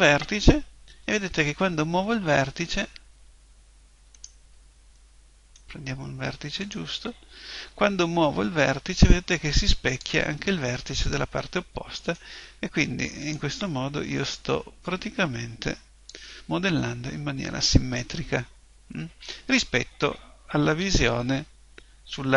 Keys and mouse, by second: 1.0 g, 1.2-4.2 middle drag, 4.2 right click, 5.0-8.1 middle drag, 6.6 right click, 8.4 middle click, 9.0 click, 10.4-13.2 middle drag, 13.2 right click, 14.8 click, 18.2-19.2 middle drag, 20.6 KP_1.